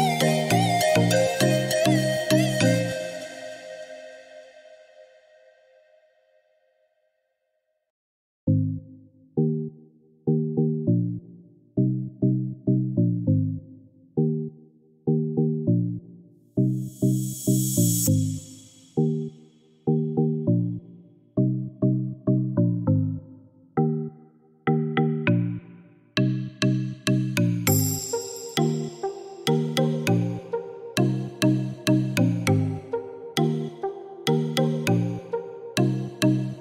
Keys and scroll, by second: 0.1 5, 0.3 0, 1.0 Return, 2.9 Escape, 19.8 ctrl+z.